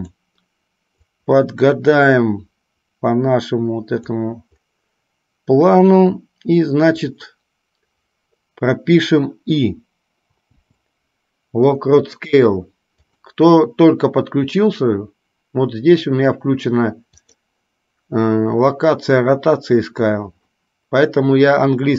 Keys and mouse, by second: 1.3 click, 1.5-4.5 drag, 13.3-21.9 drag.